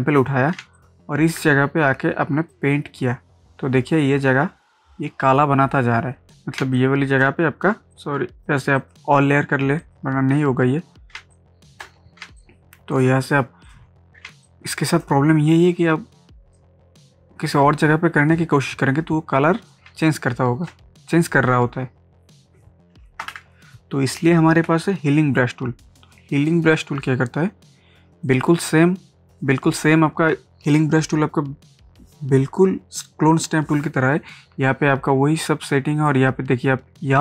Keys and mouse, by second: 0.6 ctrl+space, 0.7 ctrl+click, 1.1 ctrl+space, 2.8-6.3 drag, 6.6 ctrl+space, 6.7 ctrl+click, 7.1 ctrl+space, 7.9 click, 11.2 ctrl+space, 11.3 ctrl+click, 11.9 ctrl+space, 12.4 ctrl+click, 12.7 ctrl+space, 13.6 alt+click, 14.2 ctrl+space, 14.4 ctrl+click, 15.1 ctrl+space, 16.5-19.9 drag, 19.9 ctrl+space, 20.0 ctrl+click, 20.4 ctrl+space, 23.2 ctrl+a, 26.7-30.5 drag, 36.1-37.2 drag.